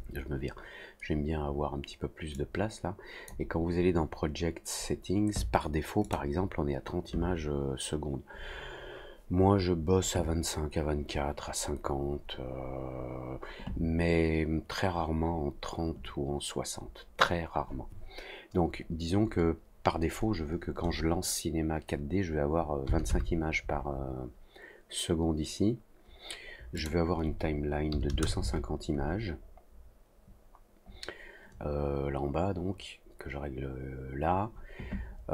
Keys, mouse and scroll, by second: 2.3 click, 6.0 click, 26.7 click.